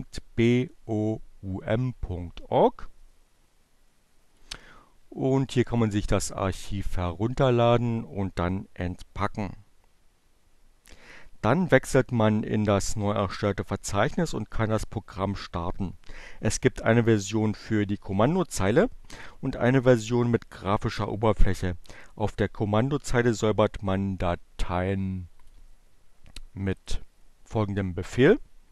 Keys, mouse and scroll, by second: 0.4-4.3 drag, 5.4 click, 24.2-25.3 drag, 26.2 click, 28.3-28.7 typing.